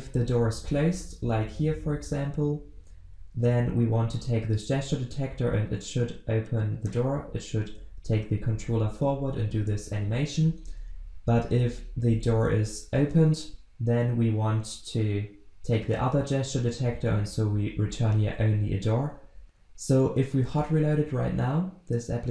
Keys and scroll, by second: 20.6 ctrl+shift+\.